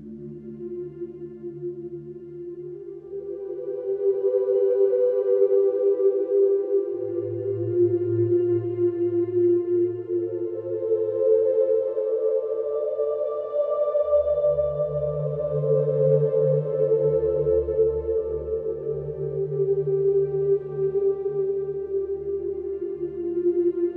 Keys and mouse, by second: 1.2-2.7 alt+shift+middle drag, 4.2-5.0 ctrl+z, 6.0-6.7 ctrl+z, 15.9 shift+middle click.